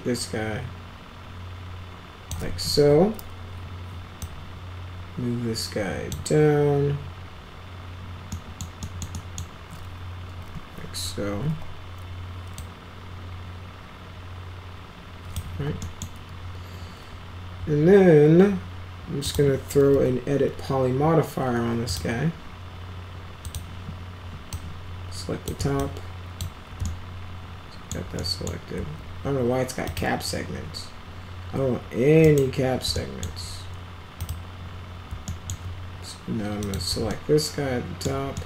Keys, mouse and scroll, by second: 2.7 w, 4.1-6.1 drag, 8.3 middle click, 8.7 middle click, 9.1 middle click, 11.4 e, 12.5-15.3 drag, 15.4 w, 15.8 middle click, 19.2 click, 19.8 e, 21.8 click, 23.4 click, 24.5-25.4 drag, 25.7-26.4 alt+drag, 26.8-27.9 alt+middle drag, 28.1-28.4 middle drag, 29.8 click, 32.2 right click, 32.9 alt+middle click, 34.1 click, 35.2 alt+middle drag, 36.6 click, 37.0 alt+middle click, 38.3 middle click.